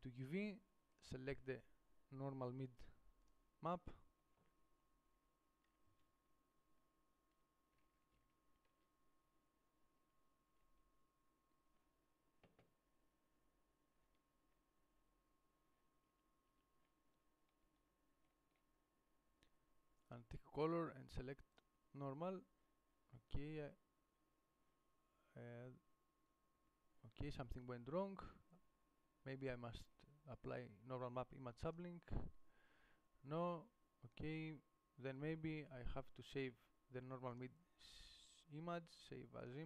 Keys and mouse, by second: 8.1 alt+z, 8.5 alt+z, 9.0 Tab, 10.2 Tab, 16.3 Tab, 16.8 Tab.